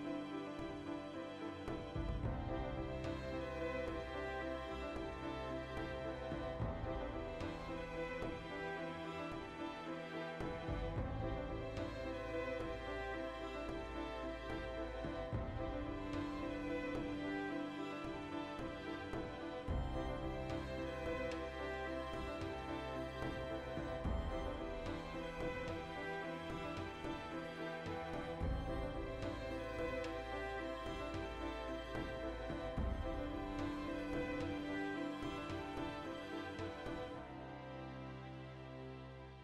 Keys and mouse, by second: 1.2 ctrl+r, 1.6 right click, 1.7 middle click, 2.1 1, 2.3 right click, 2.7 g, 7.1 alt+click, 7.3 right click, 7.6 shift+right click, 8.2 g, 8.7 right click, 8.9 g, 13.4 right click, 14.0 right click, 14.7 g, 16.1 alt+click, 16.3 right click, 16.6 g, 18.2 alt+click, 18.4 middle click, 19.1 2, 19.3 alt+right click, 19.8 ctrl+b, 20.6 click, 20.7-32.1 middle drag, 26.5 a, 32.1 shift+click, 32.2 Tab, 32.7 ctrl+2, 32.9-34.6 middle drag, 33.1 z, 33.6 Tab, 34.6 click, 35.5-37.3 shift+middle drag, 36.1 ctrl+r, 37.3 right click, 37.4-38.8 middle drag, 38.5 ctrl+r, 38.8 right click, 38.9 ctrl+r, 39.2 right click, 39.3 ctrl+r.